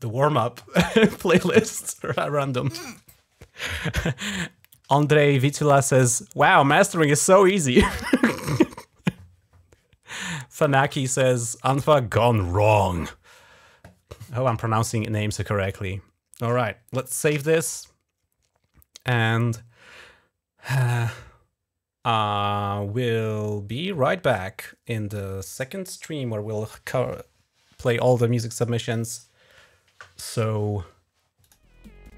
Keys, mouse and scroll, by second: 17.1 ctrl+s, 31.2 click.